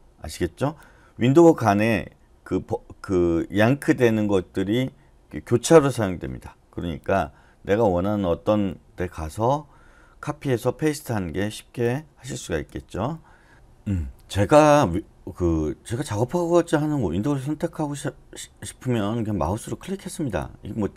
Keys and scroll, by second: 12.6 d, 12.9 d.